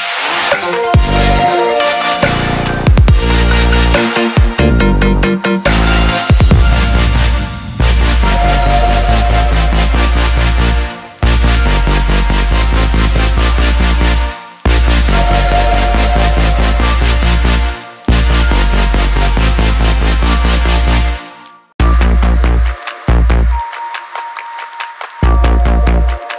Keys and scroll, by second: 10.9 ctrl+j.